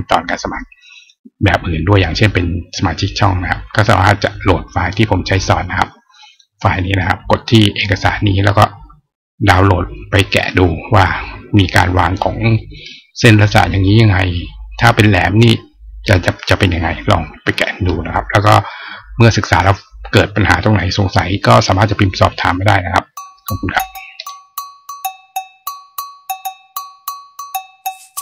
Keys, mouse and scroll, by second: 3.3-5.1 scroll down 2, 6.3 scroll up 1, 21.1 click, 24.4 click.